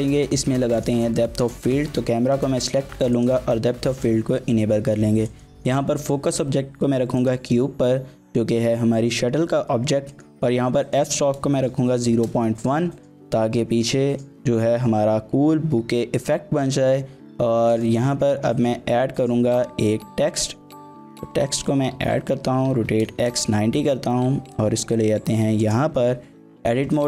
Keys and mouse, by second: 3.2 click, 5.3-7.3 drag, 10.1-13.0 drag, 18.5 shift+a, 22.0-23.9 typing, 23.3 KP_Enter, 25.6 click, 26.2 Tab, 26.9-27.0 typing.